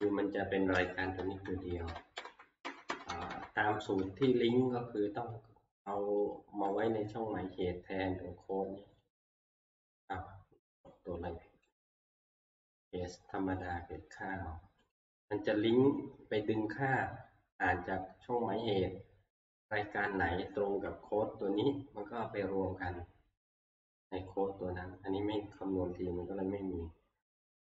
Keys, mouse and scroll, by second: 0.6 Up, 0.7 ctrl+c, 1.2 Right, 1.4 Right, 1.7 Right, 1.9 Right, 2.6 Right, 2.6 Down, 2.9 Right, 3.1 Right, 3.3 Right, 4.0 Left, 5.9 Left, 6.4 shift+right click, 6.8 right click, 9.0 click, 10.9 click, 11.8 right click, 12.7 click, 13.7 right click, 14.9 click, 20.7 Escape, 23.7-27.7 drag.